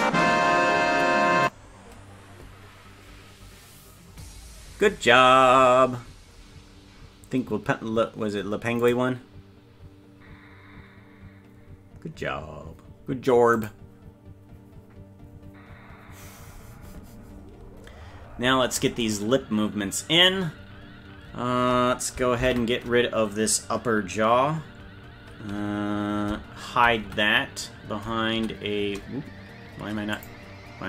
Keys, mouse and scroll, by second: 0.4-1.0 scroll down 7, 17.6-18.1 scroll up 4, 22.4 ctrl+l.